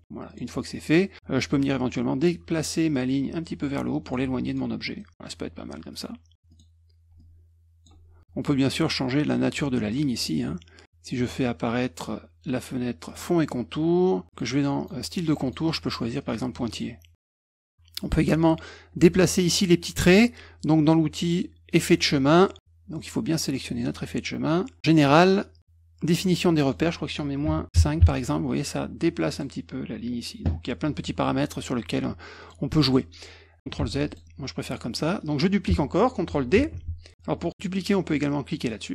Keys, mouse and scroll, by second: 0.2 click, 2.9-4.1 drag, 4.4 click, 4.9 middle click, 5.9 click, 6.5 click, 7.1 ctrl+click, 9.5 click, 10.1 click, 13.0 click, 14.3 click, 14.8 click, 15.4 click, 16.2 click, 16.8 click, 21.7 click, 23.3 click, 26.5 click, 29.3 click, 32.4 click, 33.7 ctrl+z, 34.1 click, 34.9 middle click, 36.6 ctrl+d.